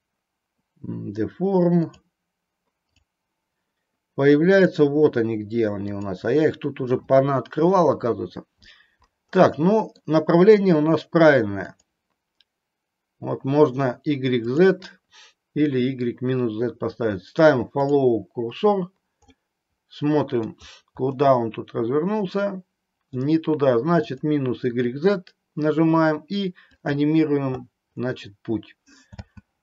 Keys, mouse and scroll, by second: 1.9 click, 4.7 click, 6.1 click, 9.5-10.0 middle drag, 11.9 click, 14.6 click, 17.9 click, 19.4-20.6 middle drag, 21.3-23.3 middle drag, 24.1 click, 27.0 click, 29.3 space.